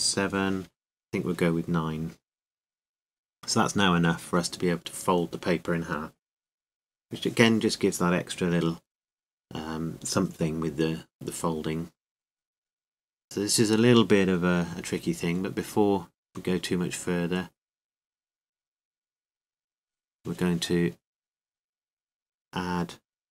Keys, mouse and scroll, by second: 12.5 Tab, 14.2-23.3 drag.